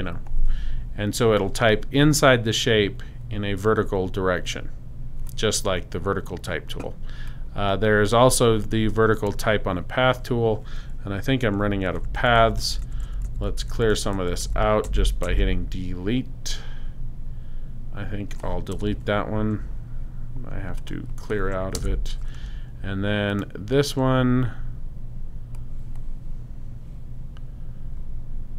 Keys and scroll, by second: 12.0 super+z, 18.7 super+BackSpace, 19.4 BackSpace, 21.7 super+BackSpace.